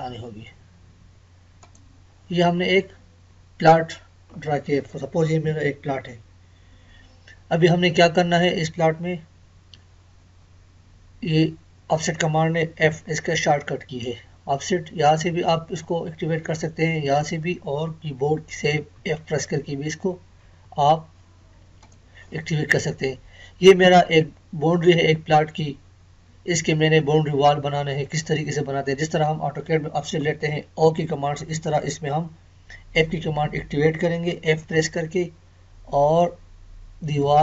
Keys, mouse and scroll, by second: 2.5-2.9 scroll down 1, 5.5 scroll up 1, 12.9 f, 18.9 f, 20.6 Escape, 21.8 click, 34.6 f, 37.2 click.